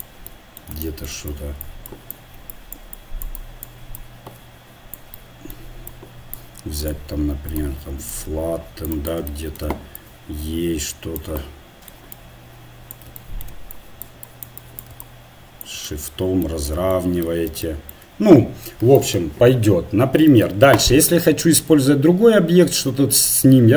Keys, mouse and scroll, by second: 0.0 click, 5.5 click, 5.7 middle click, 5.9-11.8 drag, 11.8 middle click, 12.1-16.8 drag, 16.8-18.5 middle drag.